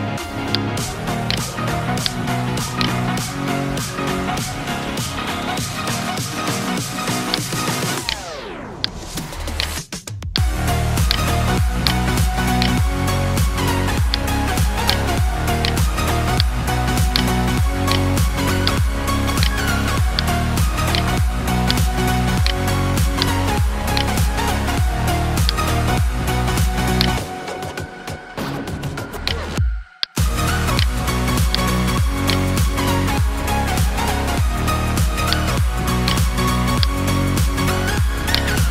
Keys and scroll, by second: 36.0 space.